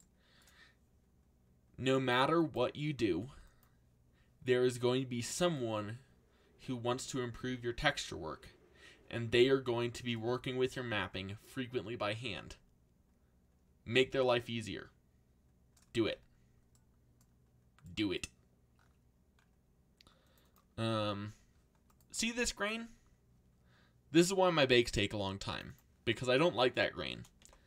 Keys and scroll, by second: 27.1 BackSpace, 27.4 0.